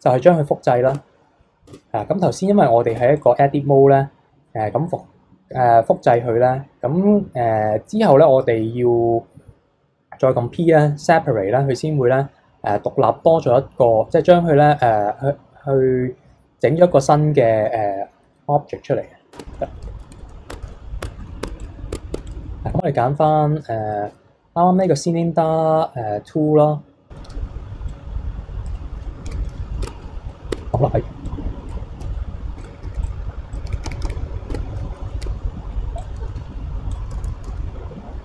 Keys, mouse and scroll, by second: 0.9 Tab, 1.7 Tab, 2.9 Tab, 3.2 click, 17.7 middle click, 18.3 KP_3, 19.3 Tab, 19.6 middle drag, 19.8 a, 20.1 KP_3, 20.5 Tab, 20.7 a, 21.0 Tab, 21.2 middle drag, 21.4 Tab, 21.6 click, 21.9 Tab, 22.1 Tab, 22.3 click, 24.1 KP_3, 27.9 click, 29.3 ctrl+z, 29.5 middle click, 29.8 Tab, 30.5 Tab, 31.3 click, 33.5 click, 33.7 ctrl+z, 33.9 ctrl+z, 34.1 ctrl+z, 34.5 Tab, 35.2 a, 36.0 click, 36.4 e, 37.1 a, 37.4 s.